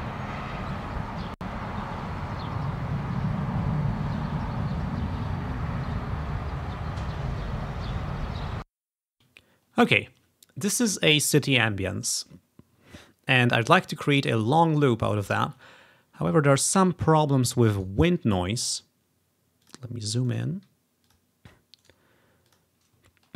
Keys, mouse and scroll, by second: 0.1-2.0 ctrl+scroll up 2, 9.4-9.8 ctrl+scroll down 1, 13.1 scroll down 2, 14.0 scroll up 1, 16.1-16.7 ctrl+scroll up 2, 17.8 right click, 19.7 click, 20.0 click, 21.1 click, 21.9 click, 22.6 click, 23.2-23.3 ctrl+scroll up 3.